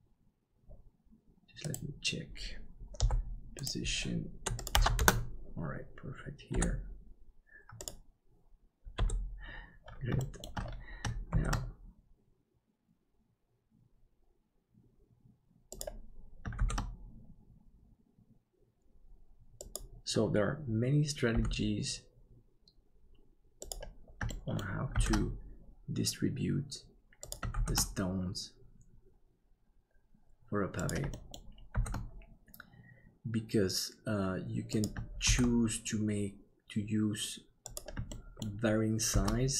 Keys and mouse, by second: 1.7-2.9 right drag, 2.9 n, 6.5 KP_7, 10.2 shift+middle click, 11.3 shift+d, 16.6 shift+d, 21.3 g, 24.4 shift+middle click, 24.9 shift+d, 31.1 shift+middle click, 31.7 shift+d, 35.2 shift+d, 38.1 shift+middle click, 39.1 shift+d.